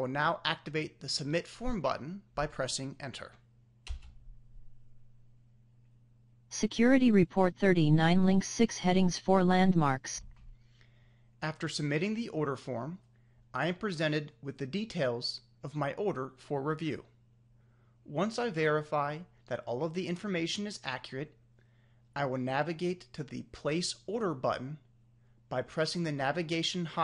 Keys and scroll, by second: 2.6 Return.